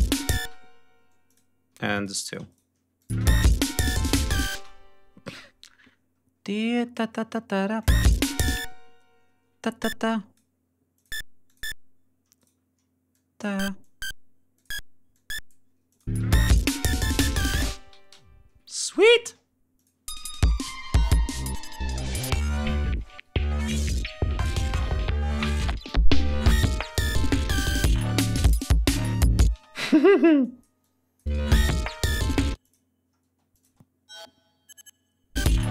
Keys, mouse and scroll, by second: 0.1 space, 0.2-0.7 scroll up 2, 1.0 click, 1.4 e, 1.6 click, 2.2 shift+right click, 2.7 shift+click, 2.9 shift+space, 3.1-3.9 ctrl+shift+scroll down 6, 4.0 ctrl+scroll up 2, 4.2 ctrl+space, 4.3-6.4 ctrl+scroll down 10, 6.4-6.7 scroll up 2, 7.5 ctrl+click, 7.6 space, 8.3 ctrl+space, 8.4 ctrl+d, 9.5 ctrl+click, 10.3 d, 10.6 click, 11.2 click, 12.1 shift+right click, 12.8 shift+click, 13.5 click, 14.3 click, 14.8 click, 15.6 click, 15.8 space, 17.6 g, 17.9 ctrl+scroll down 2, 18.5 space, 18.7 ctrl+scroll down 2, 19.4 click, 19.7 space, 24.5 ctrl+scroll up 2, 25.5 click, 25.9 ctrl+click, 27.4-29.3 drag, 29.2 space, 29.6 click, 30.1-31.1 drag, 31.0 space, 31.4 ctrl+scroll up 2, 32.3 click, 32.9 space, 33.2 click, 35.1 click, 35.5 space.